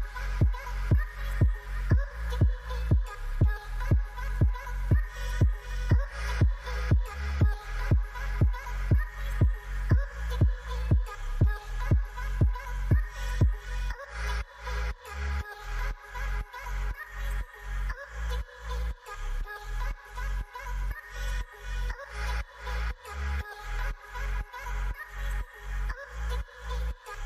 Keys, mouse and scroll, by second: 9.7 shift+click, 11.8 b, 22.5 shift+click, 24.3 shift+click.